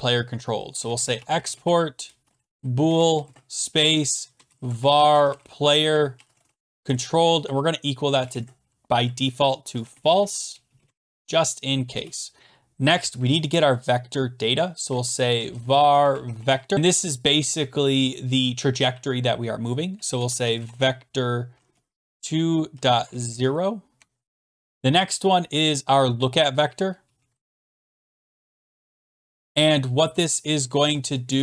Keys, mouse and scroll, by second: 0.5-8.2 typing, 9.5-11.4 typing, 11.9 Return, 14.6-17.0 typing, 19.9-21.3 typing, 22.0 Down, 22.1 Return, 22.5-23.8 typing, 24.0 Tab, 24.4 Return, 26.4-30.8 typing, 31.3 Return.